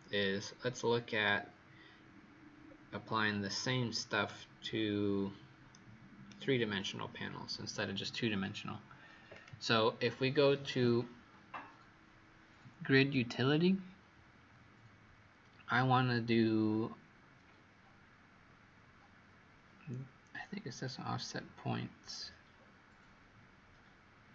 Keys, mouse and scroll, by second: 0.1-0.8 scroll down 1, 0.8-2.6 scroll down 1, 2.6-3.1 scroll down 1, 3.7-4.2 scroll down 1, 4.2 right click, 9.3 click.